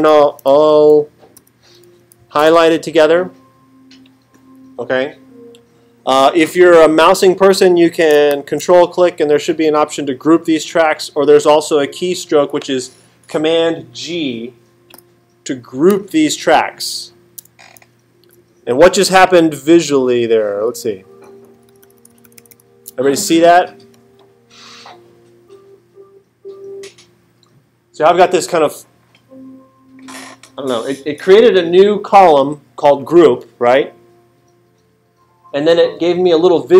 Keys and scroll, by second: 1.3 alt+super+-, 17.8 alt+super+8, 19.6 alt+super+=, 21.3 alt+super+=.